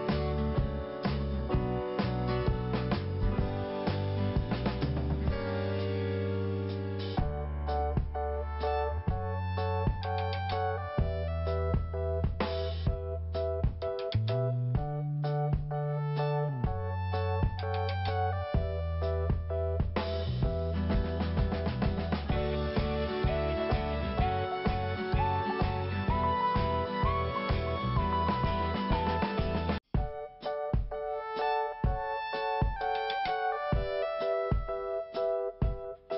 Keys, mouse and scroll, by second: 2.4 click, 2.7 double click, 3.4 double click, 7.9 click, 8.0 click, 8.1 click, 8.2 double click, 8.8 double click, 12.4 click, 12.4 click, 12.6 double click, 13.2 double click, 15.1 click, 15.2 click, 15.3 click, 15.5 double click, 16.1 double click, 17.3 scroll down 1, 18.0 scroll up 1, 19.2 click, 21.1 click, 23.6 p, 24.7 click, 26.1 scroll down 1, 27.0 scroll up 1, 29.4 click, 29.5 click, 29.8 click, 29.9 double click, 30.3 double click, 30.4 double click, 32.4 click, 32.5 click, 32.9 click, 32.9 click, 36.1 click.